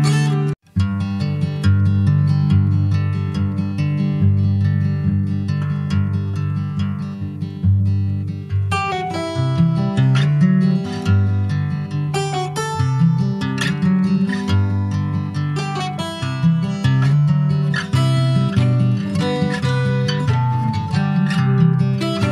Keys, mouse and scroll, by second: 0.2 shift+a, 1.1 click, 1.6 middle click, 2.3 a, 2.8 shift+a, 4.0 ctrl+a, 5.0 scroll down 4, 5.3-6.4 middle drag, 6.4 Tab, 6.5 click, 7.1 click, 9.1 a, 9.6 shift+a, 11.2 middle click, 11.5 ctrl+a, 12.8 click, 14.1 ctrl+a, 14.7 click, 15.0 a, 15.4-17.2 right drag, 17.2 click, 17.7 ctrl+s, 17.9 click, 18.3 alt+middle click, 18.6 alt+middle click, 18.9-19.6 alt+scroll up 5, 19.6 shift+middle click, 20.9 click, 21.1 /, 22.0 click.